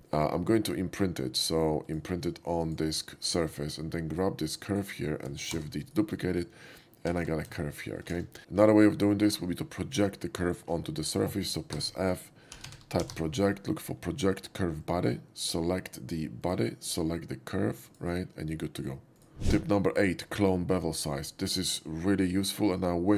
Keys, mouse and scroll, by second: 1.9 click, 2.7 click, 3.4 middle click, 4.2 right click, 4.7 click, 5.6 shift+d, 5.9 right click, 7.1 g, 7.3 g, 7.7 z, 8.2 ctrl+z, 11.9-13.2 typing, 14.9 click, 16.5 click, 18.0 click, 19.2 right click, 23.0 click.